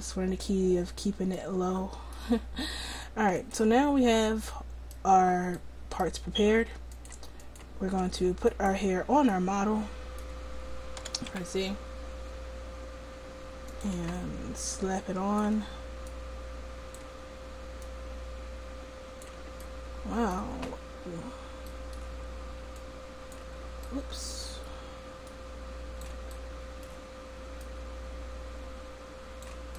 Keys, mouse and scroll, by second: 1.7 middle click, 3.4-5.2 drag, 4.2 middle click, 7.0-8.6 drag, 9.1 middle click, 11.1 r, 14.8-19.6 drag, 19.6-22.8 middle drag, 22.8-25.5 drag, 26.0 click, 28.3-29.6 drag.